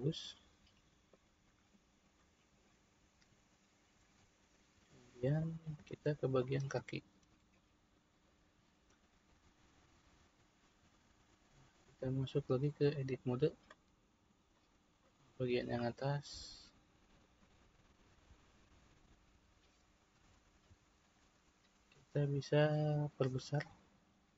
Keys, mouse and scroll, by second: 4.8 Tab, 5.5-6.4 middle drag, 6.4 click, 7.6-10.6 middle drag, 11.4-14.5 drag, 14.5 middle click, 15.3 click, 17.1 click, 18.5 middle click, 19.1-20.3 scroll up 2, 20.3-23.4 shift+middle drag.